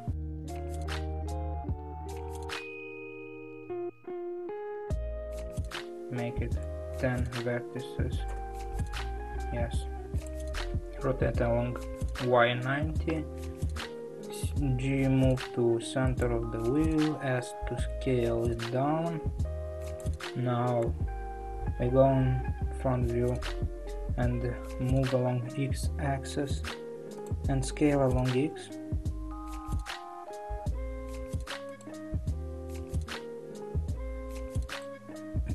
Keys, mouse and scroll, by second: 8.3 click, 11.0 r, 13.8 g, 17.1 s, 20.8 KP_1, 22.4-24.6 scroll up 3, 24.6 g.